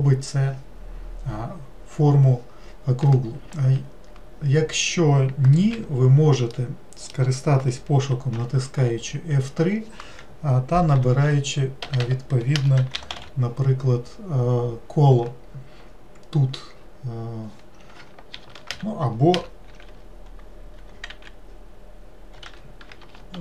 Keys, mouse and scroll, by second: 6.5-8.4 middle drag, 8.4 F3, 12.0 BackSpace.